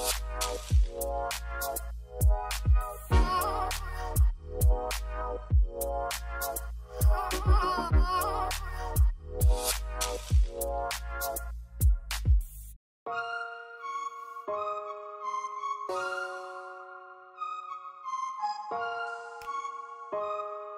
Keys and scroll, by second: 0.1 p, 1.3 l, 2.9 Escape, 5.0 r, 7.5-10.1 typing, 11.6 Escape, 15.1 2, 18.8 e.